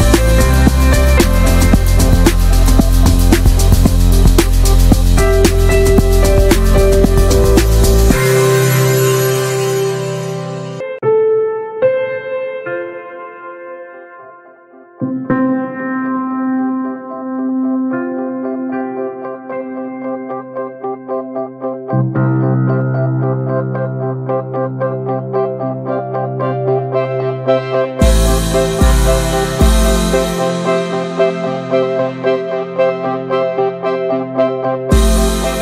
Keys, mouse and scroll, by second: 0.8 alt+middle click, 1.0 alt+middle click, 1.3 alt+z, 1.6 shift+middle click, 1.7-2.5 scroll up 4, 2.0 shift+middle click, 2.5 click, 3.1-4.7 drag, 4.7 alt+z, 5.3-7.1 drag, 7.1 alt+z, 7.3 scroll down 1, 7.4 middle click, 7.8 alt+z, 8.3 click, 8.8 ctrl+a, 9.3 middle click, 9.8 ctrl+r, 13.0-13.5 drag, 13.5 alt+middle click, 13.8 alt+middle click, 14.2 alt+z, 14.4-14.8 scroll up 1, 14.8 shift+middle click, 14.9 e, 16.4 scroll down 1, 16.6 middle click, 16.8 alt+z, 17.0 middle click, 17.3 2, 17.5-18.1 drag, 18.1 middle click, 18.4 ctrl+b, 21.0 alt+middle click, 21.5 scroll up 1, 21.7 shift+middle click, 21.9 alt+z, 22.1 shift+middle click, 22.3 s, 23.6 click, 24.3 alt+z, 24.5 middle click, 24.7 Tab, 24.9 click, 25.0 ctrl+a, 25.2 scroll down 1, 25.4-26.1 middle drag, 26.1 scroll down 1, 26.3 middle drag, 26.5 Tab, 26.7 alt+middle click, 27.0 alt+z, 29.2 alt+z, 29.4 middle click, 29.8 Tab, 29.9 click, 30.1 Tab, 30.9 alt+z, 31.2 alt+middle click, 31.3-31.8 alt+middle drag, 31.8 alt+z, 32.2 shift+middle click, 32.5 click, 33.3 alt+z, 33.5 middle click, 33.8 scroll down 1, 33.9-34.9 middle drag, 34.9 click, 35.2-35.6 middle drag.